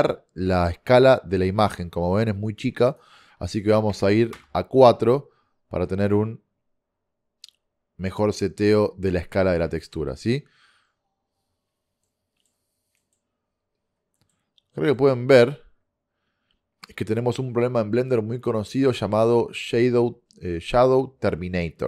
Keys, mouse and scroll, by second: 2.9-4.7 drag, 9.2 middle click, 14.7-18.5 middle drag.